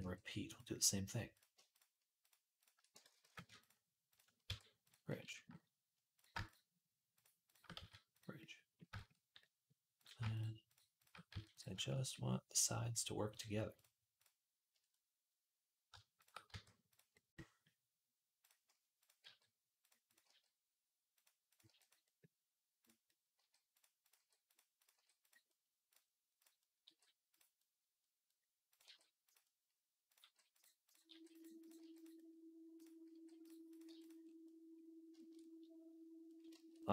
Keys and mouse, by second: 2.8-6.2 ctrl+middle drag, 2.9 ctrl+z, 3.1 ctrl+z, 4.3 q, 6.2 shift+click, 6.3-10.1 shift+middle drag, 7.2 click, 7.6 q, 10.1 click, 10.2 middle click, 10.8 shift+click, 10.9-13.1 middle drag, 11.1 q, 13.1 click, 13.2-18.3 shift+middle drag, 16.3 q, 18.3 click, 18.9-19.9 middle drag, 19.0 g, 19.9 click, 20.0-22.9 middle drag, 20.1 g, 21.5 g, 23.0-25.7 middle drag, 23.2 g, 24.0 g, 24.7 g, 25.7 click, 26.2-28.5 middle drag, 26.7 g, 28.5 click, 28.6-30.6 middle drag, 28.7 g, 30.0 g, 30.6 click, 30.7-33.5 middle drag, 30.9 g, 31.6 g, 32.9 g, 33.5 click, 33.6-35.8 middle drag, 33.7 g.